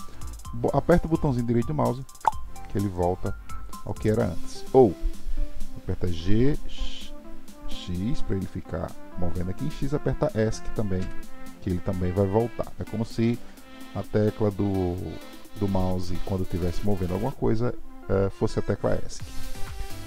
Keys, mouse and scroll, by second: 6.0 g.